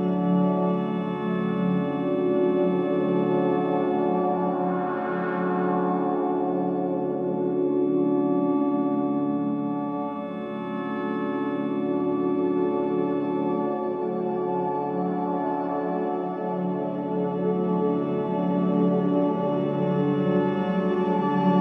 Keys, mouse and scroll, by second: 0.7-1.0 typing, 4.2 click, 7.1 scroll up 1, 8.3 right click, 10.0 scroll up 1, 10.3 scroll down 1, 13.8 click, 14.3 scroll up 1, 15.5 click, 16.1-16.5 scroll down 1, 19.1 click, 19.9 right click, 21.1-21.6 drag.